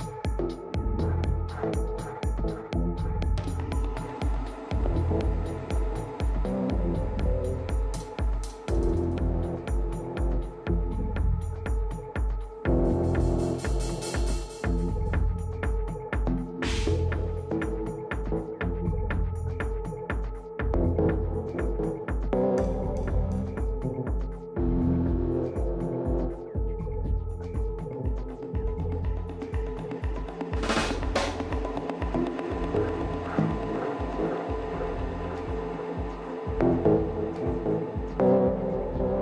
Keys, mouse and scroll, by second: 0.0-1.1 middle drag, 1.6 z, 3.1-4.2 middle drag, 12.7-19.1 middle drag, 14.1 Tab, 19.5-21.4 middle drag, 21.7 t, 23.1-24.9 drag, 23.9-25.9 middle drag, 27.6-30.4 drag, 29.2 middle click, 30.2-32.1 middle drag, 30.2 right click, 32.1-34.0 right drag, 34.2-36.9 drag, 36.7-38.1 middle drag, 36.7 right click, 38.1-39.2 right drag.